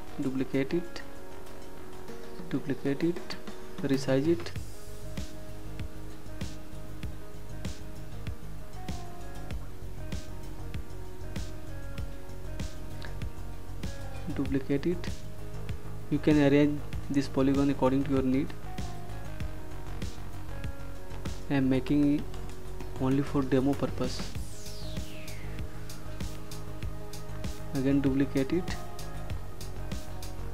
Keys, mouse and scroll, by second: 0.7 ctrl+click, 2.2 click, 6.4 ctrl+shift+click, 7.7 ctrl+d, 12.4 click, 16.3 click, 17.5 -, 18.7 click, 23.9 click, 26.1 ctrl+d.